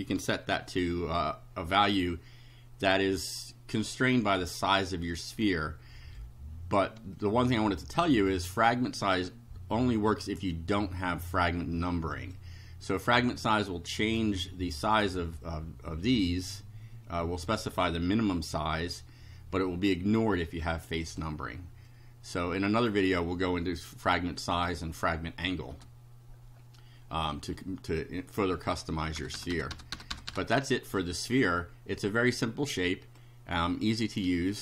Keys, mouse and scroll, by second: 0.2 =, 7.2-8.5 drag, 10.6-12.5 drag, 12.9 click, 20.6 click, 21.9-23.1 drag, 25.7 BackSpace, 27.5 click, 27.9 click, 28.8 Up, 29.2 BackSpace, 32.4 click.